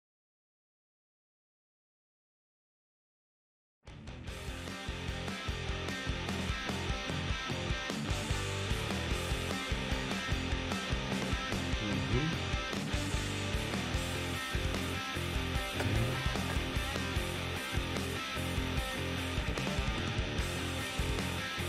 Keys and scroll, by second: 6.1 k, 8.0 a.